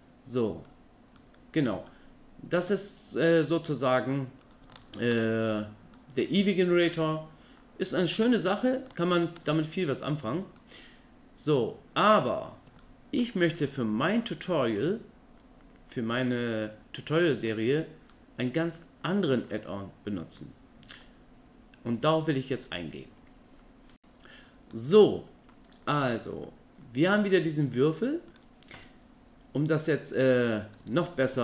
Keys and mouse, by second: 1.2-1.9 middle drag, 2.7-4.4 middle drag, 4.8-5.1 ctrl+middle drag, 5.9-6.8 middle drag, 8.2 middle click, 8.9-9.4 ctrl+middle drag, 9.6 middle click, 10.6-12.5 middle drag, 12.8-13.2 ctrl+middle drag, 13.6-14.3 middle drag, 18.1-19.3 middle drag, 24.7 middle click, 27.1-28.3 ctrl+middle drag, 30.9 Tab.